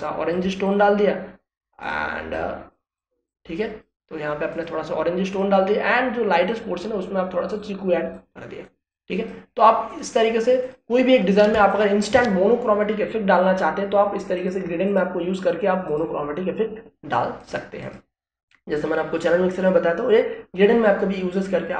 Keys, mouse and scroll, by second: 0.6-4.0 alt+drag, 12.5 space, 12.7 ctrl+click, 12.7-15.3 ctrl+drag.